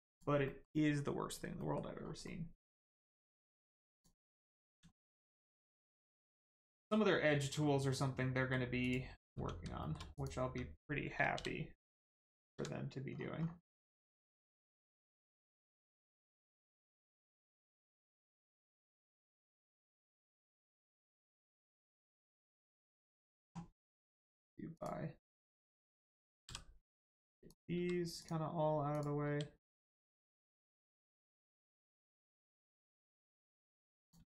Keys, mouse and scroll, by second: 0.0 click, 0.4 middle click, 1.9 scroll up 1, 2.2 middle click, 2.8 Tab, 3.2 middle click, 3.6 Tab, 3.9 click, 4.3 middle click, 4.9 shift+middle click, 5.3 middle click, 5.3 middle click, 6.0 click, 6.4 middle click, 7.0 scroll down 1, 7.5-7.8 scroll up 1, 7.9 middle click, 8.8 click, 9.1 middle click, 9.3 Tab, 9.8 shift+middle click, 10.1 click, 10.3 Tab, 13.1 scroll down 1, 13.7 middle click, 14.1 scroll up 1, 14.7 shift+middle click, 15.0 scroll up 1, 15.5 middle click, 16.1 scroll up 1, 16.4 middle click, 17.5 click, 19.0 middle click, 19.7 click, 21.5 middle click, 22.2 scroll down 1, 22.7 shift+middle click, 24.7 click, 25.7-26.1 scroll down 1, 26.4 g, 26.8 click, 27.7 g, 28.1 click, 29.2 g, 29.9 click, 30.4 middle click, 32.2 scroll up 1, 32.9 middle click, 34.0 click.